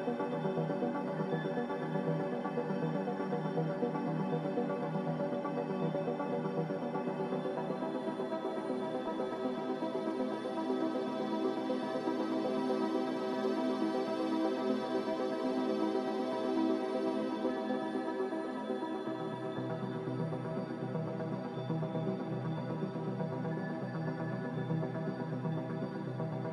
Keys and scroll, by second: 3.9 z, 7.2-8.1 typing, 9.9 b, 18.3 z, 21.3 1, 23.2 6.